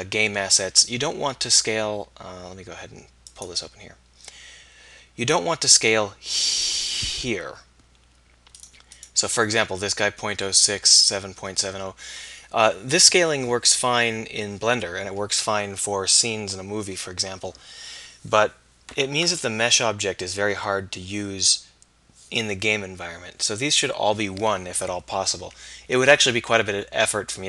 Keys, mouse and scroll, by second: 4.9-5.3 right drag, 8.7-11.0 right drag.